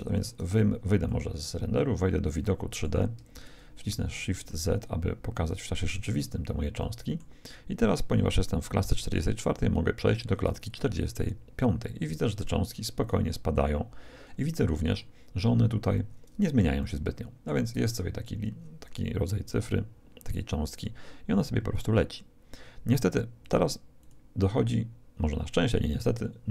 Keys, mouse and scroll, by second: 0.0 Escape, 1.0-3.0 middle drag, 3.3 shift+z, 4.4-6.3 middle drag, 6.8-8.5 middle drag, 10.6-14.6 drag, 14.2-18.8 middle drag, 21.7-25.8 drag, 25.6-26.5 middle drag.